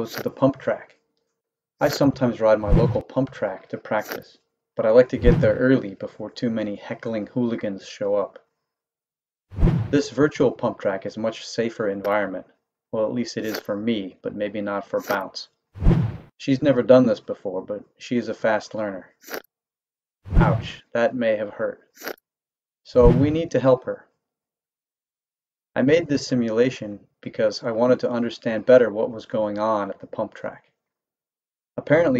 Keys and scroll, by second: 0.0 Up, 0.6 Right, 0.9 Left, 1.2 Right, 1.4 Left, 1.8 Up, 2.2 Right, 2.9 Up, 2.9 Right, 3.6 Left, 4.0 Up, 4.0 Right, 7.0 Right, 7.3 Left, 7.7 Right, 8.4 Right, 9.1 Right, 12.0 Up, 12.0 Right, 12.9 Left, 13.4 Up, 13.4 Right, 14.5 Left, 15.0 Up, 15.0 Right, 16.5 Right, 16.6 Left, 17.0 Right, 17.3 Left, 17.7 Right, 18.1 Left, 19.1 Left, 19.2 Up, 19.7 Left, 21.1 Up, 21.1 Right, 21.7 Left, 22.0 Up, 22.0 Right, 23.4 Right, 23.6 Left, 23.9 Right, 24.3 Left, 24.5 Right, 24.9 Left, 25.2 Right, 25.6 Left, 26.1 Right, 26.6 Right, 27.3 Left, 27.8 Right, 28.1 Left, 28.5 Right, 28.9 Left, 29.4 Right, 30.0 Left, 30.4 Right, 30.8 Left, 31.1 Right, 31.6 Left.